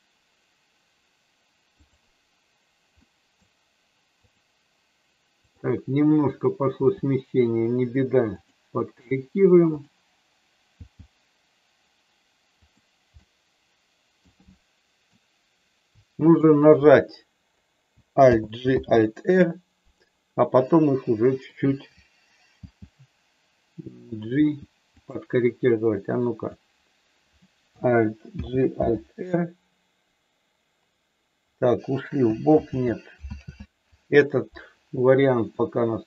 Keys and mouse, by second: 1.7 click, 3.0 middle click, 4.2 click, 6.8 g, 10.8 g, 12.5 click, 13.2-14.2 middle drag, 14.4 middle click, 16.3 shift+click, 18.2 alt+g, 20.7 middle click, 22.5 g, 24.3 g, 25.1 click, 26.1 click, 28.4 alt+g, 32.7 ctrl+z, 33.3 ctrl+z, 35.5 middle click.